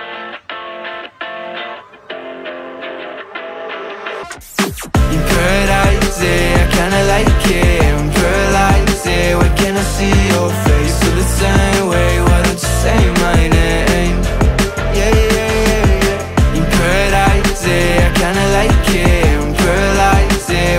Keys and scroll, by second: 0.0-0.3 typing, 0.6 Escape, 3.7 a, 8.0 ctrl+alt+c, 9.1 ctrl+alt+v, 10.8 2, 10.9 0, 11.0 Return, 12.8 alt+Up, 15.1 Up, 16.8 Up, 18.6 space, 20.1 r.